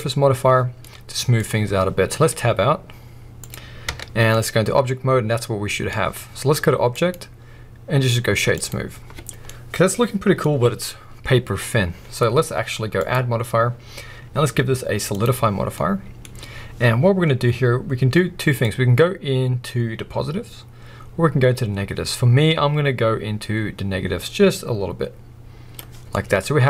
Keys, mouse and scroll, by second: 0.8-3.5 middle drag, 2.3 `, 3.5 click, 3.9 Tab, 4.3-6.9 middle drag, 6.9-9.4 drag, 9.4-13.0 middle drag, 10.5-13.0 scroll up 1, 13.0-15.7 drag, 15.6 scroll down 1, 15.7-18.6 middle drag, 16.2-18.6 scroll up 1, 18.6-26.1 drag, 26.1-26.6 middle drag.